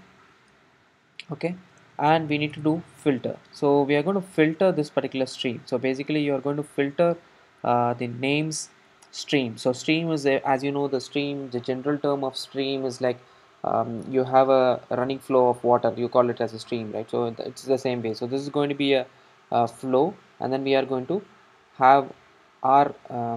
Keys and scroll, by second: 3.2 Return.